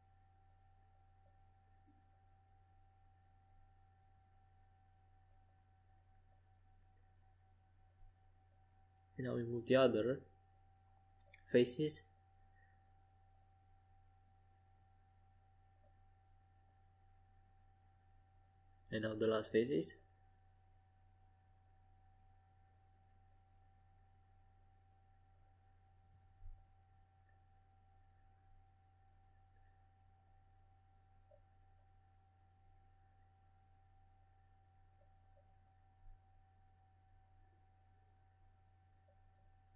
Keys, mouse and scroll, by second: 0.7 c, 2.9 g, 4.8 click, 5.2 Escape, 5.5 a, 6.6 c, 9.1 click, 11.0 g, 11.7-14.2 drag, 16.6 a, 17.3 c, 21.1 g, 31.7 a, 36.8 c.